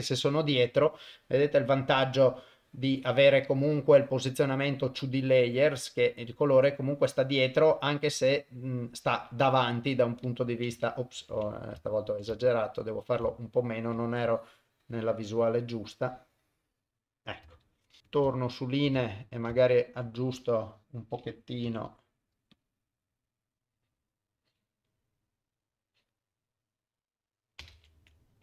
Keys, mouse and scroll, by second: 1.3-3.8 middle drag, 4.4 middle click, 5.7 middle click, 6.6-8.8 middle drag, 9.1 KP_0, 11.2 ctrl+z, 11.8 shift+middle click, 12.4 ctrl+middle click, 13.3 shift+middle click, 13.6 shift+click, 14.3-17.4 drag, 17.6 ctrl+middle click, 18.1 click, 18.4 shift+middle click, 19.0 ctrl+middle click, 19.6 shift+middle click, 21.6 u, 23.6 click, 25.8 click, 27.7 ctrl+z.